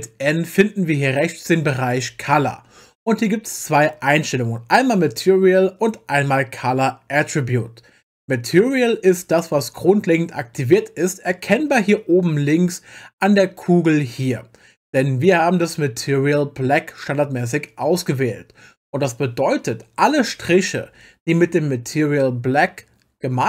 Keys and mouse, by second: 1.9 click.